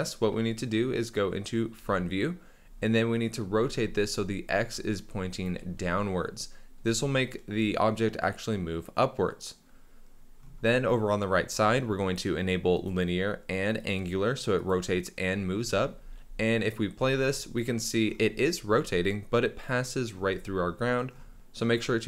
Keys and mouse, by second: 1.8 KP_1, 3.4 r, 12.8 click, 14.6 click, 16.0 space, 17.0 space, 19.6 click, 21.3 space, 21.3 KP_1.